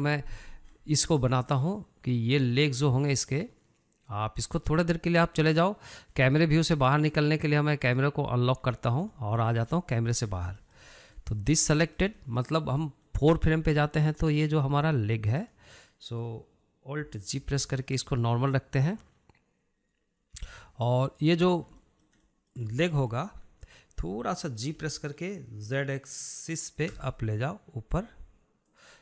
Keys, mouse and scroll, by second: 0.2 middle click, 0.9-1.2 scroll up 2, 1.2-1.8 shift+middle drag, 1.8 scroll up 1, 2.0-7.0 shift+middle drag, 8.0 click, 8.7 click, 9.5-10.0 scroll up 1, 10.0-11.1 shift+middle drag, 11.1-11.5 scroll up 2, 11.5-16.2 shift+middle drag, 16.2 drag, 18.3 alt+g, 21.9 drag, 22.3-22.6 scroll down 1, 22.6-25.6 shift+middle drag, 25.6 g.